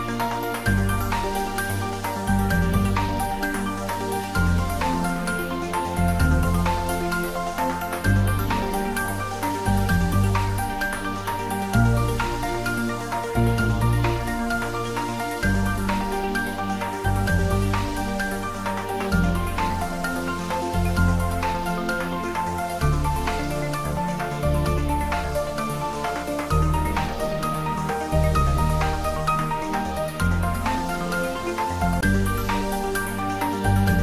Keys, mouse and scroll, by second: 1.0 ctrl+z, 2.0 scroll down 1, 2.5-3.9 middle drag, 3.9-6.0 typing, 5.0 middle click, 11.0 click, 11.5-12.4 scroll up 1, 12.4 s, 14.1 click, 14.1-15.8 typing, 15.4 click, 16.6 click, 18.0-23.1 typing, 20.6 click, 21.7 click, 23.0 click, 24.5 click, 25.1-28.4 middle drag, 28.4 click, 29.0-29.4 scroll up 1, 30.7 shift+d, 32.4 y.